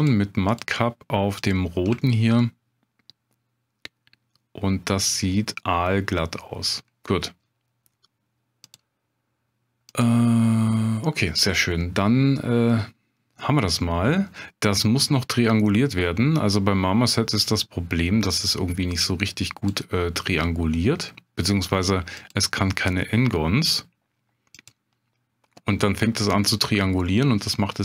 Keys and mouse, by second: 2.0 shift+drag, 2.4-6.8 middle drag, 8.8-10.8 drag, 11.5-12.0 middle drag, 12.4-13.2 middle drag, 13.8-14.3 middle drag, 17.6 click, 19.0-19.7 drag, 22.2-25.0 drag, 27.0-27.8 middle drag.